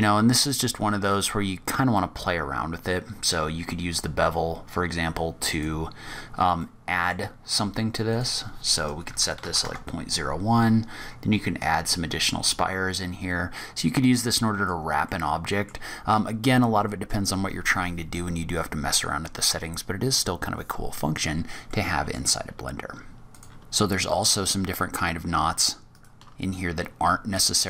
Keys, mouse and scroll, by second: 5.3 click, 6.5 middle click, 7.9 click, 11.5 click, 14.9 middle click, 15.9-16.5 scroll down 2, 16.5 middle click, 21.5 middle click, 22.6-23.2 scroll down 4, 23.2 click, 23.8-24.5 scroll down 2, 24.5 scroll down 1, 24.7-25.3 scroll up 3, 25.8 shift+right click, 27.5 click.